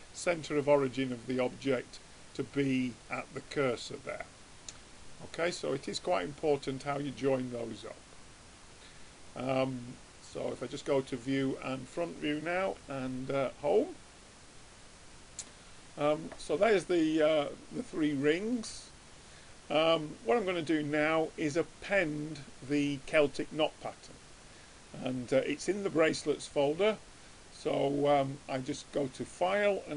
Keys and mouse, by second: 0.8-4.9 middle drag, 6.2-7.9 drag, 8.3-10.0 drag, 10.2 middle click, 10.7-12.4 drag, 12.9 Home, 14.9-16.2 drag, 16.2 right click, 16.6 click, 17.5-19.0 middle drag, 27.2-28.8 drag.